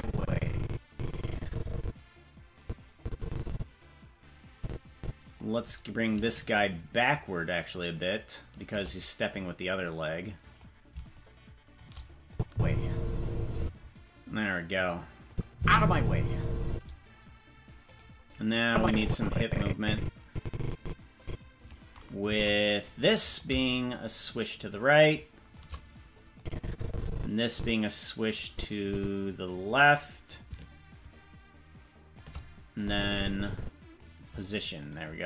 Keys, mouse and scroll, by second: 6.6-8.8 shift+drag, 9.2-10.6 drag, 11.1 shift+click, 12.3 click, 12.4 space, 13.6 space, 15.2 click, 15.5 space, 16.7 space, 17.9 right click, 18.6-21.7 drag, 22.3 Left, 23.3-25.6 drag, 26.3-29.5 drag, 30.2-32.2 drag, 32.8-34.0 drag, 34.9 right click.